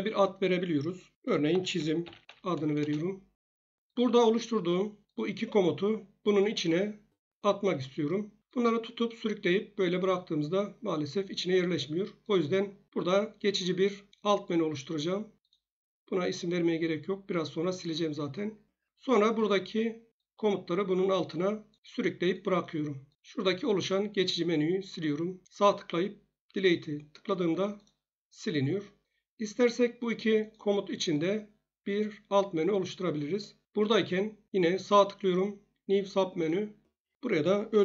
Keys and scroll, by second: 1.5-2.3 typing, 2.8 shift+Return.